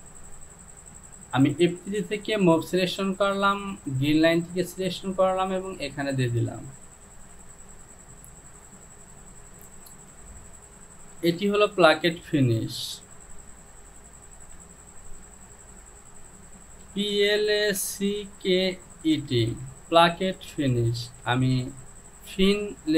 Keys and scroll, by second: 8.9 j, 11.2 Home, 14.5 e, 17.7-22.4 typing.